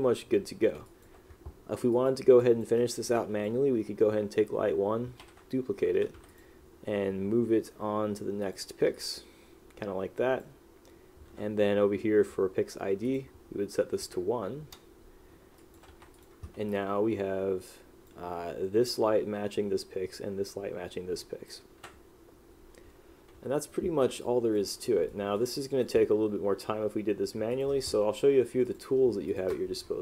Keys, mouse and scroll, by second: 1.0 click, 2.5 click, 2.9 right click, 3.3 click, 6.4 click, 8.6 click, 9.1 click, 14.7 Return, 15.7 click, 16.8 click, 21.3 click, 23.8 right click, 24.3 click, 25.2 right click, 25.8 click, 27.6 click.